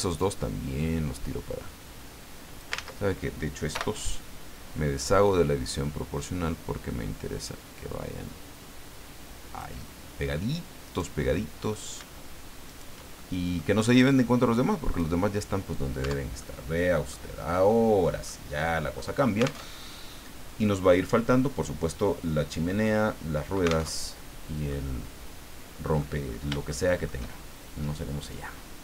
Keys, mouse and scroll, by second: 0.2 click, 1.2-1.8 scroll up 1, 2.1 scroll up 1, 2.8 ctrl+z, 3.7 o, 5.0-9.8 drag, 10.9 right click, 11.3 middle click, 12.7 shift+right click, 13.2 shift+click, 14.1 click, 15.3-15.6 scroll down 1, 16.0 Tab, 16.4 click, 17.4-17.9 scroll down 2, 18.2 middle click, 19.6 alt+Tab, 23.9 alt+Tab, 24.7-26.1 drag, 26.2-26.5 scroll up 3, 26.7 shift+click.